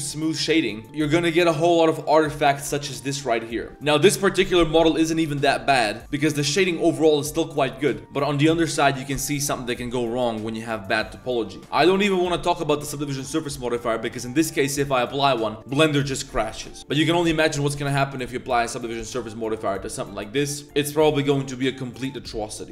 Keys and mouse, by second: 0.9 click, 3.7 middle click, 4.9 KP_Decimal, 5.6-5.9 middle drag, 6.0-6.7 middle drag, 6.9-7.4 middle drag, 7.7 middle drag, 8.0 middle click, 8.3 middle drag, 8.9 middle drag, 9.9-10.3 middle drag, 10.5 middle drag, 10.8 click, 11.2 middle click.